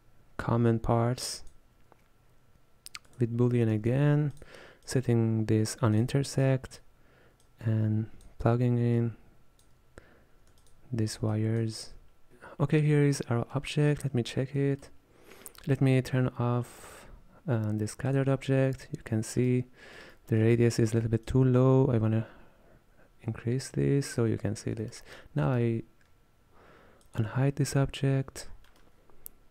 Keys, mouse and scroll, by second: 3.1 click, 3.9 shift+d, 4.9-6.6 drag, 7.5 click, 9.0 click, 10.8 alt+shift+click, 13.6 middle click, 14.3-14.6 scroll up 2, 14.6 shift+middle click, 15.0-15.8 scroll up 1, 15.8-18.2 scroll up 1, 18.4 click, 19.4-21.4 middle drag, 21.4-24.4 shift+drag, 24.5-24.9 scroll down 1, 24.9 shift+middle click, 25.2-25.6 scroll up 3, 25.6-27.1 shift+middle drag, 27.1 click, 28.5 scroll down 1, 28.7-29.5 middle drag.